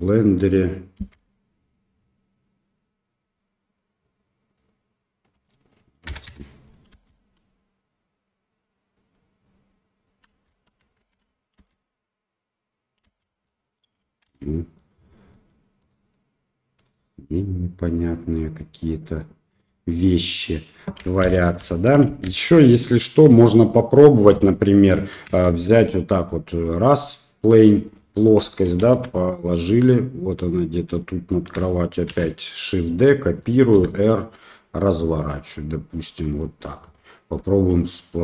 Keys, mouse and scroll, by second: 1.7 space, 5.3-6.6 drag, 6.9 space, 10.3 space, 11.0 shift+Left, 11.6 space, 13.4 space, 13.4 middle drag, 14.3 ctrl+z, 14.5 middle drag, 15.3 middle click, 15.8 click, 17.4-19.5 middle drag, 20.0 drag, 21.3 ctrl+z, 21.7 shift+drag, 22.3 ctrl+z, 22.8-23.2 middle drag, 23.7-24.2 middle drag, 24.3 KP_7, 25.4 shift+a, 26.3 KP_7, 27.8-28.2 middle drag, 28.4 KP_1, 28.8 KP_3, 30.4 click, 32.1 shift+d, 33.7 r, 37.5 g.